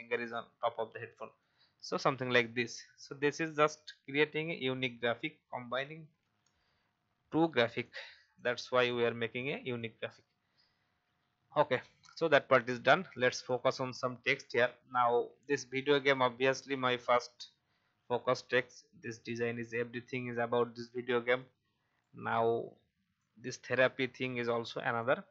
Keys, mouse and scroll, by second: 1.3 click, 2.4 alt+scroll down 1, 3.8 click, 7.0-7.8 scroll up 1, 7.8 click, 10.3-10.6 scroll up 1, 11.4 alt+scroll down 1, 13.4 click, 14.0-14.4 scroll up 1, 15.4-25.3 drag.